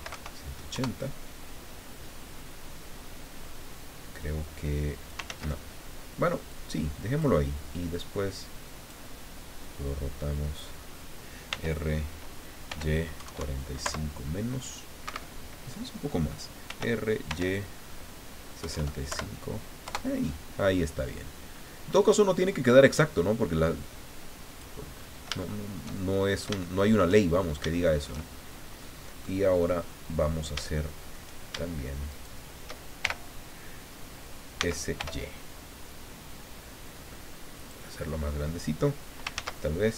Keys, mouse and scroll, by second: 0.0-0.1 typing, 0.7 KP_Enter, 4.2-5.3 drag, 5.3 ctrl+z, 6.5 click, 7.9-9.1 drag, 9.6-10.8 drag, 11.5 r, 12.7 y, 13.2 KP_4, 13.2 KP_5, 13.8 KP_Decimal, 15.0 Escape, 16.7 r, 17.3 y, 18.6 KP_6, 18.7 KP_5, 19.1 KP_Subtract, 19.8 KP_Enter, 21.9-23.2 drag, 23.8 click, 24.9-25.3 scroll up 1, 25.4-28.2 shift+middle drag, 28.8 scroll up 2, 29.4-29.9 scroll down 2, 29.9 click, 30.7 shift+click, 32.1 shift+right click, 33.0 shift+l, 34.6 s, 35.0 y, 37.5 click, 39.3 ctrl+z.